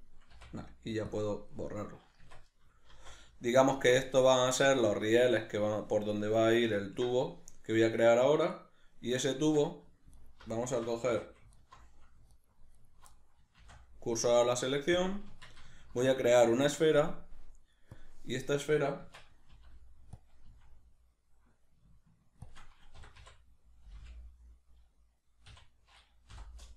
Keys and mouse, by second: 0.3 x, 1.5 middle click, 2.2 Tab, 2.9-10.2 middle drag, 2.9 z, 9.4 Tab, 10.2 alt+right click, 11.1 2, 11.5 alt+right click, 12.3 alt+right click, 12.7 alt+right click, 13.1 middle click, 13.5 shift+s, 15.3 Tab, 15.8 shift+a, 19.0 Tab, 20.2 click, 20.5 s, 22.5 shift+click, 23.0 r.